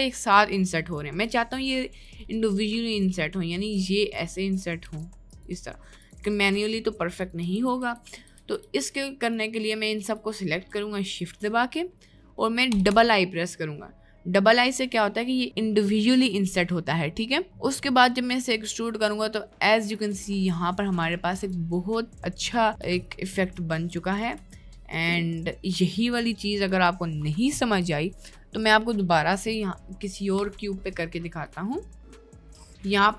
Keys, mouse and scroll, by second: 3.3 middle click, 3.8 i, 4.8 i, 6.3 i, 7.5 ctrl+z, 7.9 ctrl+z, 8.1 ctrl+z, 8.5 ctrl+z, 8.7 ctrl+z, 10.4 middle click, 11.2 click, 11.8 middle click, 17.6 middle click, 18.5 e, 20.1 Tab, 20.5-21.1 middle drag, 21.4 click, 21.8 middle click, 23.4-23.8 middle drag, 23.9-24.3 middle drag, 24.6-26.0 middle drag, 32.2 shift+middle click, 32.6 Tab.